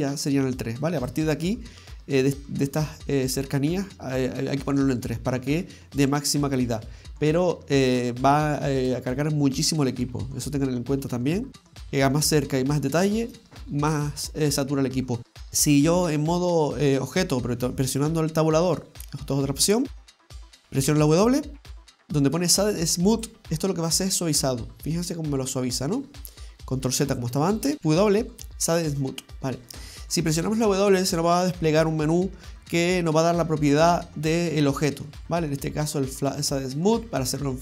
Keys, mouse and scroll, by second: 1.0 click, 1.8 middle click, 8.8 click, 9.7 scroll down 1, 15.5 middle click, 15.5-16.9 scroll down 1, 19.6-20.9 scroll down 1, 20.9 w, 24.4 middle click, 27.1 ctrl+z, 27.8 middle click, 27.8 x, 27.8 w, 29.5-29.9 scroll down 1, 29.9 middle click, 34.0 w.